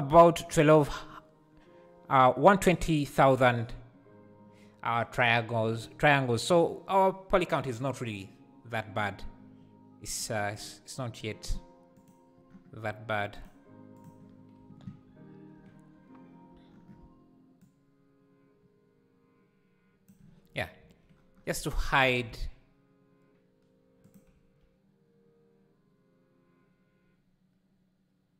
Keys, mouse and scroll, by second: 22.1 s, 24.3 g.